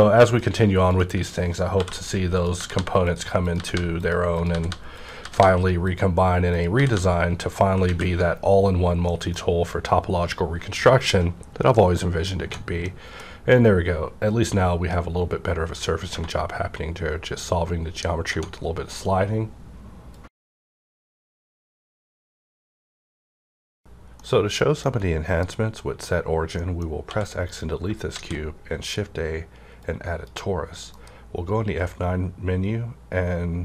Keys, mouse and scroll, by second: 0.3 click, 1.7-5.2 typing, 2.3 shift+click, 3.0 click, 4.0 click, 4.9 click, 5.9 click, 6.5 click, 6.8 g, 7.4 click, 7.8 alt+a, 8.6 scroll down 1, 9.0 middle click, 9.1 middle click, 9.1 scroll down 1, 11.8 middle click, 12.4 Tab, 12.8 Tab, 12.8-14.4 middle drag, 13.2 scroll down 1, 14.4 scroll down 1, 16.1 Tab, 18.4 Tab, 26.0 scroll up 1, 26.1 middle click, 27.0 x, 27.4 click, 28.1 shift+a, 29.8-33.1 drag, 30.8 F9.